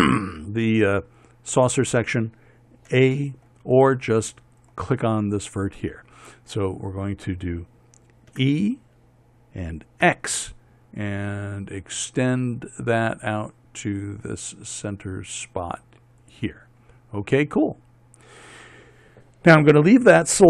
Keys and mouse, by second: 3.4 a, 5.1 click, 6.0 click, 6.6 click, 8.8 e.